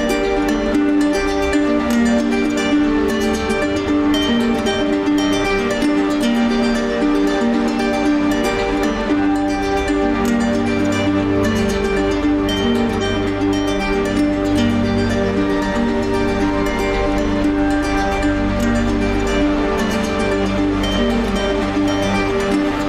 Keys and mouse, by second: 1.4 ctrl+z, 1.7 ctrl+z, 2.3 ctrl+z, 3.0 alt+z, 3.7 click, 4.2 g, 10.1 click, 14.7 click, 21.6 alt+z.